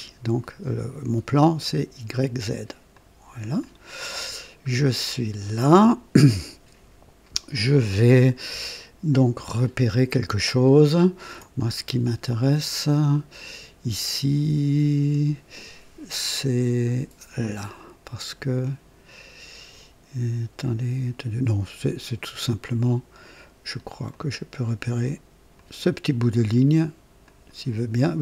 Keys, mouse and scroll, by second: 2.9 click, 3.6 click, 4.7-5.4 scroll up 2, 5.6-6.4 right drag, 9.6-11.4 ctrl+alt+drag, 11.7-12.2 ctrl+alt+scroll up 3, 12.4-13.5 right drag, 24.1 click, 25.5 click, 27.2 click.